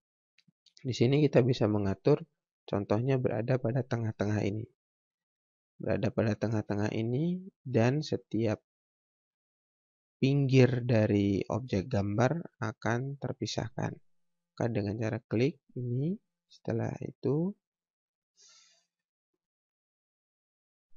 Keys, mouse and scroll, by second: 2.3 scroll down 1, 3.3 click, 6.1 scroll up 1, 9.5-9.9 scroll up 1, 13.2 scroll down 1, 14.9 click, 18.3 click.